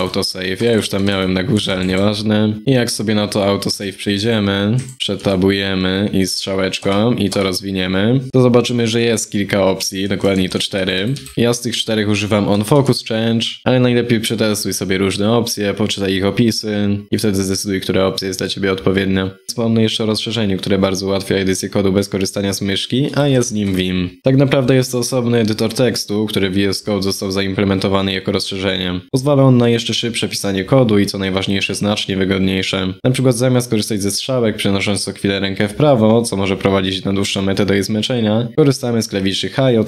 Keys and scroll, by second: 29.6 ctrl+c, 30.1 ctrl+x, 33.2 alt+Down, 33.2 alt+Down, 33.2 alt+Down, 33.3 alt+Down, 33.6 alt+Up, 34.3 ctrl+Right, 34.3 ctrl+Right, 34.4 ctrl+Right, 37.6 ctrl+], 38.0 ctrl+[.